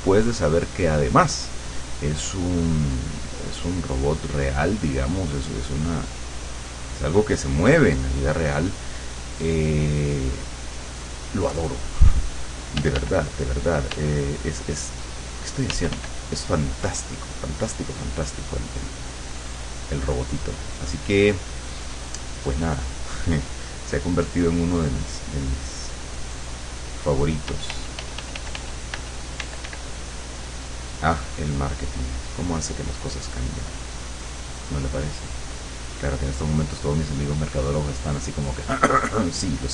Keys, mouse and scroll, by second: 2.0-3.8 drag, 3.9-8.1 drag, 9.9-10.9 drag, 11.6-13.0 drag, 12.9 g, 13.1 click, 14.0 g, 15.7 f, 16.3-23.1 drag, 24.9 click, 25.8 click, 27.5 f, 29.5 d, 30.0 click, 31.3 click, 32.2 click, 34.1 click, 34.6 click, 35.9 click, 37.7 click, 38.6 click.